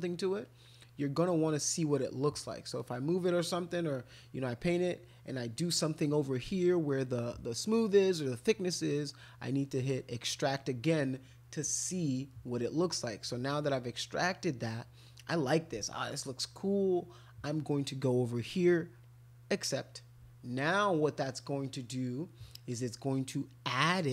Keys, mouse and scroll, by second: 0.4-1.5 drag, 2.8-4.1 drag, 9.6 click, 19.0 click, 21.6 click.